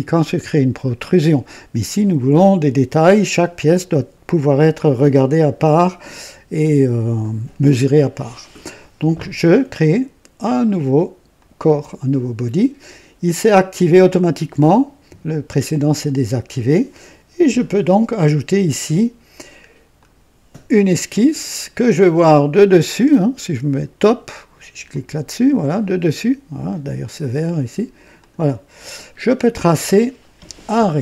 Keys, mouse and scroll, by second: 11.3 click, 19.9 click, 22.1 click, 23.1-24.0 drag, 24.8 click, 28.1 click, 29.2 scroll down 1, 29.6-30.3 right drag.